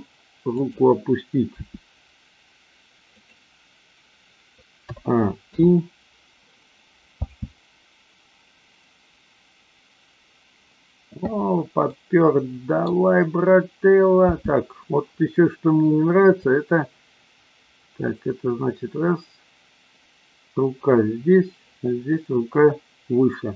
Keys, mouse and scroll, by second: 0.7 click, 1.4 r, 3.2 click, 4.8 a, 5.5 i, 7.2 space, 11.8-12.8 middle drag, 14.3 space, 16.3-23.5 drag.